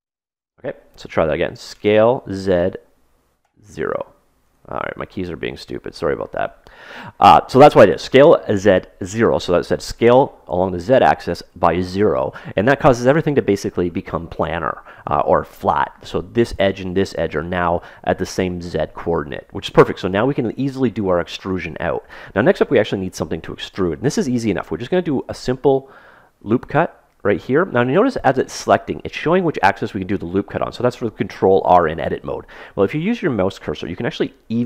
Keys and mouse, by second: 1.7 s, 25.3 ctrl+r.